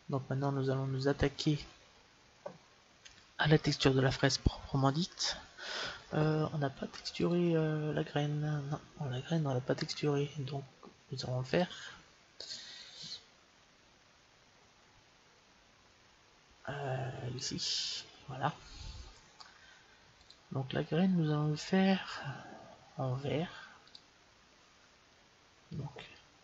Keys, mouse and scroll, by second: 0.7-7.2 middle drag, 7.2-8.9 drag, 11.4-13.3 drag, 17.3-19.1 right drag, 20.1-22.0 drag, 23.8-25.7 drag, 26.3 Delete.